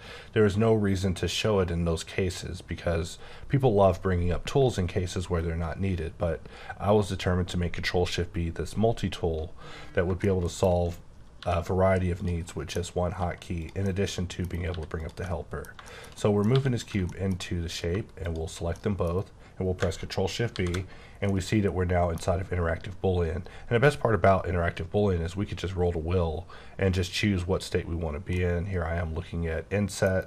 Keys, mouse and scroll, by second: 8.1-10.0 scroll down 2, 10.2 shift+middle click, 11.4 g, 12.2 click, 12.5 middle click, 12.8 scroll up 2, 13.2 g, 13.6 click, 13.8 middle click, 15.0 click, 15.2 middle click, 16.2 double middle click, 16.5 g, 16.8 click, 17.1 middle click, 18.2 shift+click, 18.7 middle click, 20.5 shift+b, 21.3 middle click, 23.8-26.4 scroll up 11, 26.4-27.0 scroll down 2, 27.0-28.3 scroll up 1, 28.3 middle click.